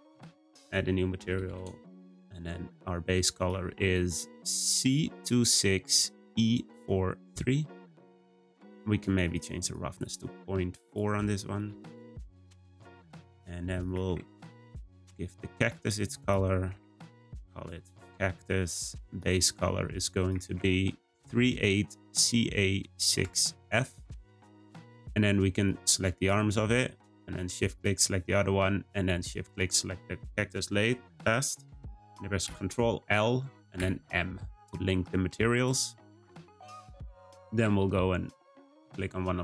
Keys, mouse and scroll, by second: 10.8-13.9 drag, 14.6 click, 15.6-19.1 drag, 19.4 click, 26.1 click, 27.7 shift+click, 29.4 shift+click, 32.4 ctrl+l, 35.5 click, 38.6 click.